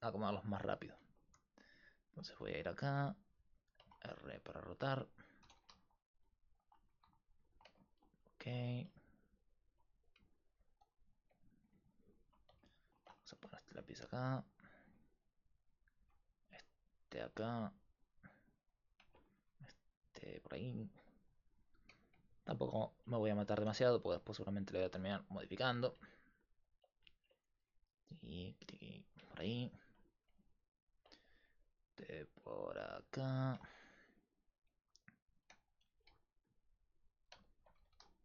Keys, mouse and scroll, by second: 1.0-2.6 right drag, 2.3 r, 4.1 middle click, 5.5 r, 7.0 r, 9.0-12.4 drag, 9.0 alt+right click, 12.4-13.6 right drag, 13.3 r, 13.7 g, 14.9 r, 15.8-17.5 right drag, 16.1 r, 16.5 g, 17.4 r, 19.4 r, 20.7 middle click, 21.6 right click, 22.5 right click, 23.6 r, 24.9 g, 27.6 r, 30.5-33.4 right drag, 31.4 r, 35.8 r, 37.5-38.2 middle drag, 37.8 r.